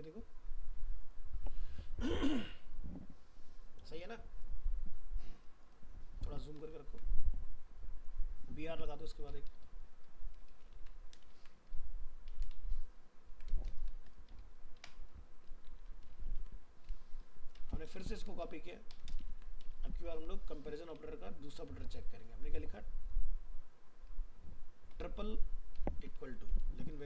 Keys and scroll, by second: 10.8 ctrl+c, 11.3 ctrl+v, 12.5 ctrl+shift+Left, 16.4 ctrl+s, 17.8 ctrl+c, 19.3 ctrl+v.